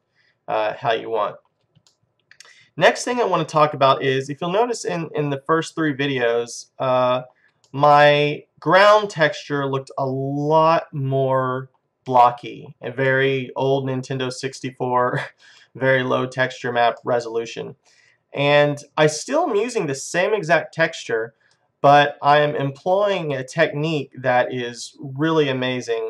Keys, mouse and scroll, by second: 0.0-2.3 middle drag, 2.4 middle click, 8.0-9.4 middle drag, 9.6 middle click, 9.9 middle click, 10.2 middle click, 12.2 middle click, 12.5 middle click, 13.5-15.6 middle drag, 15.8-17.2 middle drag, 24.2-25.8 middle drag.